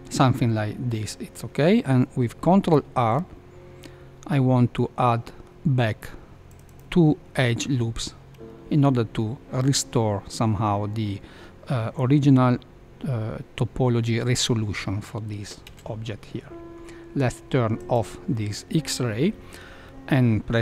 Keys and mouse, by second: 2.4 ctrl+r, 15.6 Tab, 17.8 click.